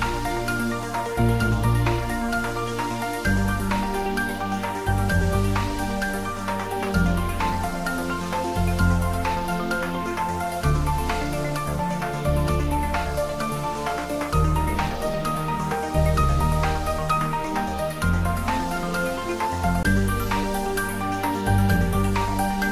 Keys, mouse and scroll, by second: 0.7 click, 1.4 ctrl+r, 2.0 click, 4.3-6.8 middle drag, 6.8 ctrl+r, 7.8 click, 9.7 middle click, 10.6 ctrl+r, 11.9 click, 16.6 click, 17.1 ctrl+r, 17.7 click, 20.2 ctrl+r, 20.6 click, 22.3-22.7 middle drag.